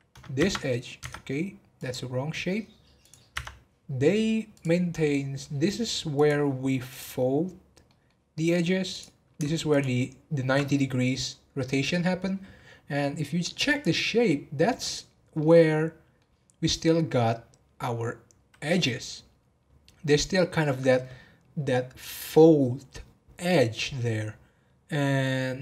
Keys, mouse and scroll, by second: 0.3 Tab, 1.0 Tab, 1.8 click, 3.0 click, 3.3 Tab, 4.5 click, 5.1-6.1 middle drag, 6.1 click, 6.8 click, 7.8-8.9 middle drag, 8.9 click, 9.7 ctrl+click, 13.6 click, 14.2 middle click, 15.1 scroll up 1, 15.3-18.5 middle drag.